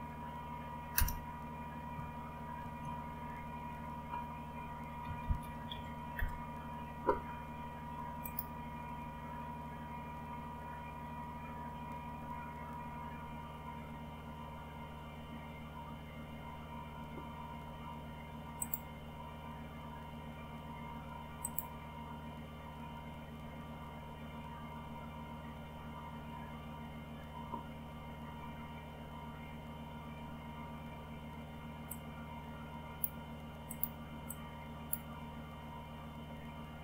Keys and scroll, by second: 0.9 Return, 2.5 ctrl+x, 4.7-6.1 typing.